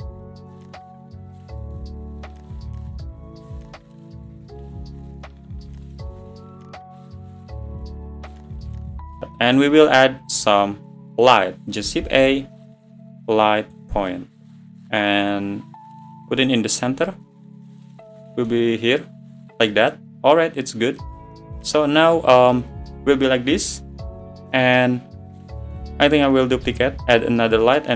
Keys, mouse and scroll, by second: 0.3 shift+d, 0.6 click, 1.1 click, 1.6 shift+d, 1.8 click, 2.3 scroll down 1, 2.5 click, 2.9 click, 3.0 middle drag, 3.3 `, 3.4 scroll down 3, 3.6 shift+d, 3.8 click, 4.1 middle drag, 4.4 scroll up 1, 4.6 click, 5.1 scroll down 1, 5.1-5.9 middle drag, 5.9 click, 5.9 scroll up 2, 6.5 click, 6.8 shift+click, 7.0 `, 7.3 shift+d, 7.5 g, 8.1-8.7 middle drag, 8.7 click, 8.8 middle drag, 8.9 scroll up 1, 9.1-9.8 scroll down 5, 9.4-9.7 middle drag, 10.6 `, 11.0 scroll down 5, 13.9 shift+a, 14.1-15.4 middle drag, 15.4 click, 17.2 `, 17.5 middle click, 17.9 scroll down 3, 18.1 middle click, 19.1 click, 19.7 middle click, 20.1-20.7 scroll down 2, 20.7 click, 21.8 click, 22.9 click.